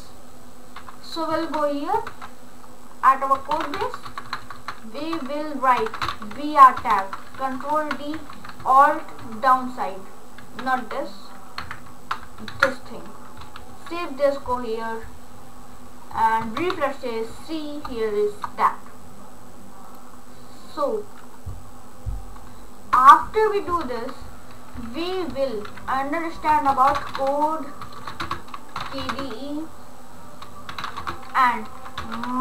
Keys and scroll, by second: 3.4-4.2 typing, 5.6-6.9 typing, 7.6 ctrl+d, 8.4 Down, 9.3 alt+Down, 10.6 ctrl+z, 11.6 Up, 12.6 alt+Down, 13.7 ctrl+s, 23.0 Tab, 23.9 ctrl+/, 26.5-32.4 typing.